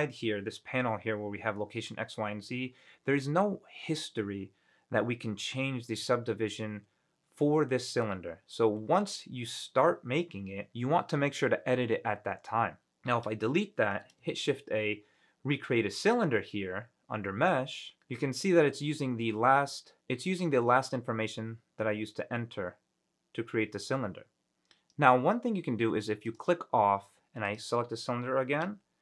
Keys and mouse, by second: 13.5 Delete, 14.5 shift+a, 26.4 click, 27.6 click, 28.9 F9.